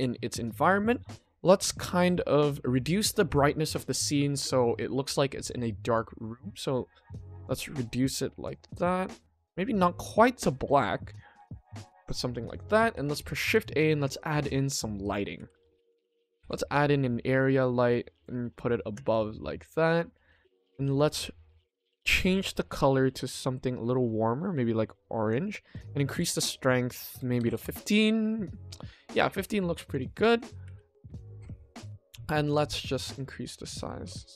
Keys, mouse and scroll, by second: 5.8 click, 12.0 click, 12.8 ctrl+s, 13.4 shift+a, 15.3 s, 19.1 click, 19.6 click, 21.0 click, 21.8 click, 22.5 click, 25.7-27.5 drag, 29.1 click, 29.8 click, 30.6 5, 31.8 click, 32.8 5, 33.9 g.